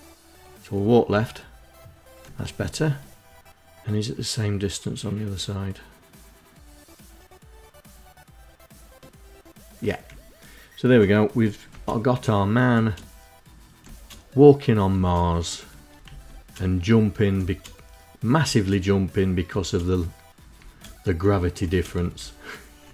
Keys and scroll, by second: 0.5 Left, 2.1 Right, 9.5 Left, 11.1 space, 12.1 space, 13.2 space, 14.3 space, 15.5 Right, 15.6 space, 16.8 space, 17.8 space, 18.9 space, 19.9 space, 21.0 space, 21.5 Left, 22.2 space.